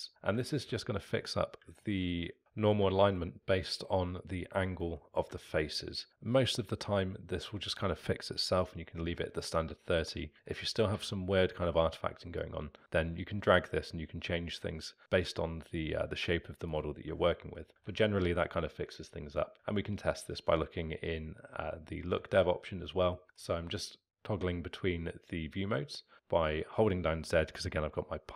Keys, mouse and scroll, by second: 3.0-12.4 alt+middle drag, 12.4-15.0 drag, 17.3-19.5 alt+middle drag, 19.5-20.4 z, 22.9 middle click, 23.6-24.4 z.